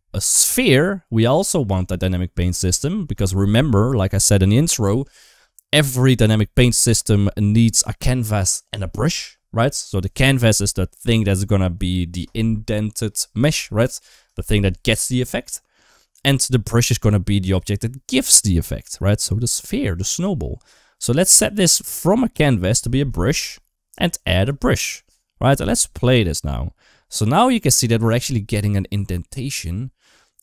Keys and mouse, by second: 2.4 click, 22.1-23.4 drag, 24.2 click, 25.8 space, 27.2 middle click, 29.4 middle click, 30.3 middle click.